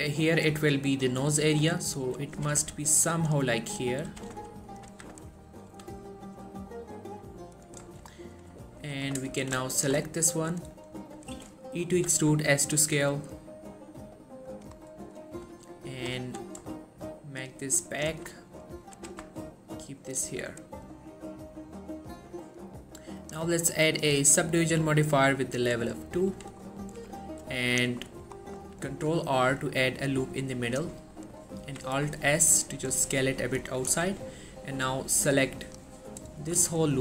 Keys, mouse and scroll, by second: 1.6 g, 2.2 right click, 2.5 g, 2.6 y, 3.4 click, 4.2 g, 4.4 y, 4.8 click, 5.0 z, 5.3 scroll down 1, 5.5 middle click, 5.8 1, 6.3-7.9 middle drag, 8.1 scroll up 1, 8.4 middle click, 9.0 click, 9.8 alt+shift+click, 10.2-11.1 middle drag, 12.1 e, 12.4 s, 14.6 click, 14.9 middle click, 15.2 scroll up 1, 15.4 middle click, 15.6 3, 16.1 g, 16.3 y, 18.0 click, 18.2 1, 18.4-19.1 scroll down 1, 19.1 g, 19.3 x, 20.1 click, 20.4 Tab, 20.7 scroll down 1, 20.9-23.0 middle drag, 23.3 click, 26.0-26.6 middle click, 26.4 1, 26.8-27.1 scroll up 1, 27.1 Tab, 27.8 click, 28.1 middle click, 28.5 scroll up 1, 29.0 ctrl+r, 29.7 click, 31.1 middle click, 31.3 scroll up 1, 31.7 alt+s, 32.1 scroll up 1, 33.2 click, 33.8 scroll down 1, 34.0 1, 35.8 click.